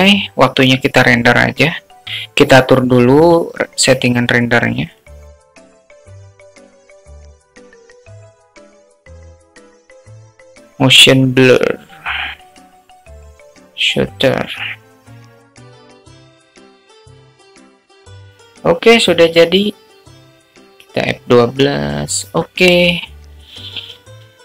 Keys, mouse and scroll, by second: 3.0-3.8 drag, 5.3 click, 5.5 drag, 5.7 drag, 6.1 click, 6.3 click, 6.5 click, 6.8 click, 7.0 click, 9.0-9.8 drag, 11.0 click, 11.8 click, 13.1-16.3 drag, 16.9 click, 17.6 click, 18.0-18.8 drag, 19.7 click.